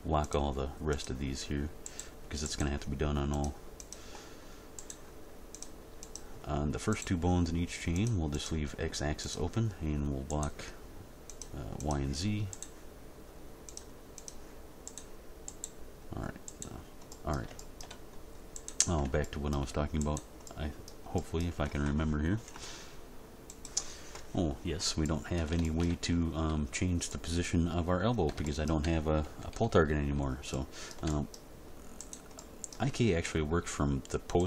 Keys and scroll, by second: 29.2 End, 29.6 Page_Down, 33.3 g.